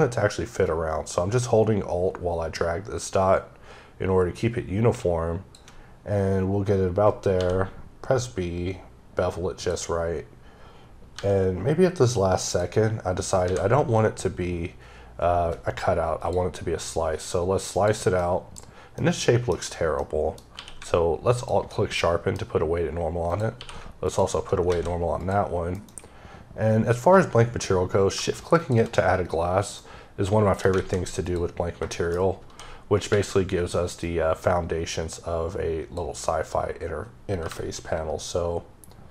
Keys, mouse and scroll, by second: 0.5 alt+click, 7.2 b, 8.3 scroll up 2, 9.5 click, 11.0 b, 12.3 click, 13.3 x, 16.1 click, 17.6 click, 18.1 middle click, 18.5-19.2 scroll up 3, 19.8 middle click, 20.0 scroll down 1, 20.4 q, 21.2 alt+click, 21.8 middle click, 23.2 click, 23.4 q, 23.9 alt+click, 24.6 alt+a, 25.1 click, 25.6 m, 28.5 shift+click, 29.6 middle click, 30.7 a, 31.1 click, 31.8 shift+middle click, 32.3 d, 33.9 click, 37.3 t.